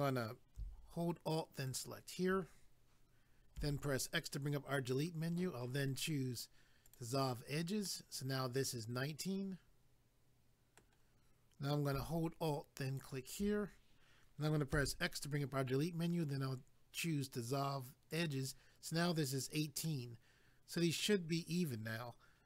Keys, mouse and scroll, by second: 1.6 alt+click, 1.8 alt+click, 6.8 click, 6.9 click, 7.9 middle click, 12.9 alt+click, 18.1 click, 19.8 middle click.